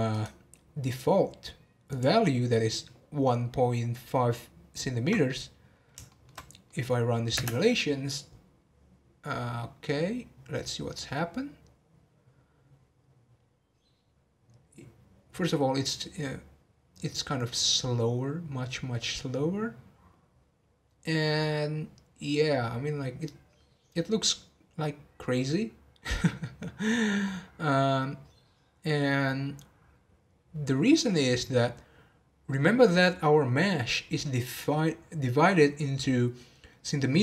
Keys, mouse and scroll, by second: 0.1-5.2 right drag, 6.1 shift+middle click, 6.3 scroll down 1, 6.7 middle click, 7.3 space.